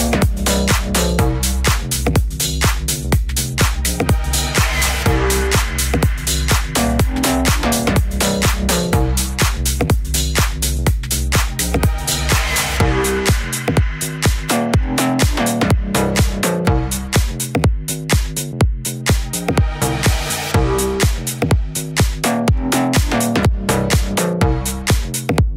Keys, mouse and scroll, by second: 0.0 middle click, 0.9 a, 1.0 c, 1.3 click, 2.3 a, 2.8 Tab, 3.4 z, 4.3 click, 4.6 middle click, 5.4 click, 6.8 click, 7.4 click, 8.1 click, 8.8 click, 9.8 click, 10.1 t, 10.7 middle click, 11.0 a, 11.3 click, 12.9 a, 13.2 click, 16.1 click, 17.5 middle click, 18.5 middle click, 22.8 ctrl+s.